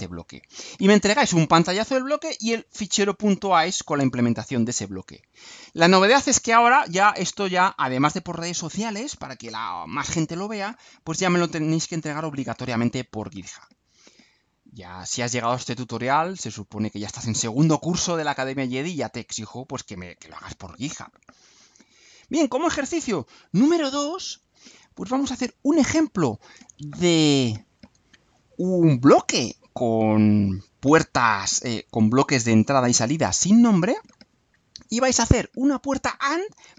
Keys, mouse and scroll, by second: 21.5 click, 22.6 click, 23.3-24.3 scroll down 6.